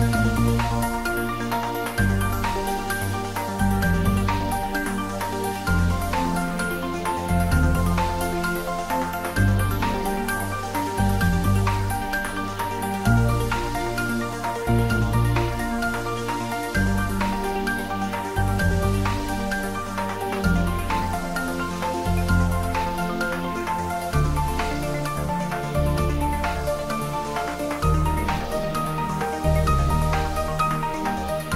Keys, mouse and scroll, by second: 0.1 ctrl+s, 0.3-1.7 ctrl+middle drag, 1.7 click, 2.5 click, 3.1-4.1 typing, 4.7 click, 5.3 shift+d, 6.0 x, 7.0 click, 7.1-7.9 typing, 10.1-11.1 typing, 10.1 click, 15.1 click, 16.4-17.8 typing, 20.0 Return, 21.2 s, 22.6 click, 22.9 ctrl+s, 23.3 middle click, 24.4-26.2 ctrl+middle drag, 26.4 middle click, 27.4 click, 27.9 ctrl+s, 28.1 middle click, 28.9-30.5 ctrl+middle drag, 30.5 click, 31.1 ctrl+3.